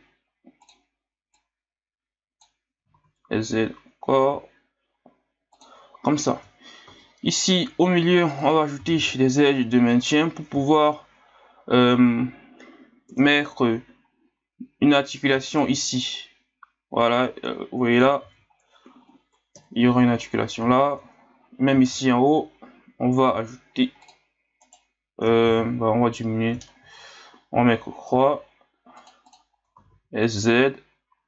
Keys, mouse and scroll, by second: 1.3-2.8 drag, 2.8 s, 6.0-6.7 scroll up 1, 6.9 ctrl+r, 8.7 s, 10.3-10.7 scroll up 1, 10.7 scroll down 2, 11.1-11.4 scroll up 4, 13.1 KP_3, 15.5 alt+right click, 16.1 click, 18.2 ctrl+z, 19.5 KP_1, 20.7 scroll up 6, 21.7 ctrl+r, 25.5 ctrl+z, 26.8 ctrl+r, 29.8 s.